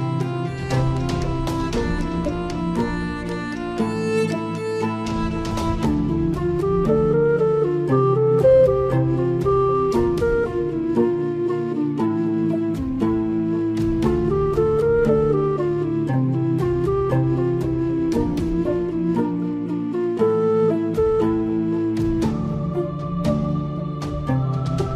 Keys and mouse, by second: 1.7 KP_7, 5.5 s, 22.8 z.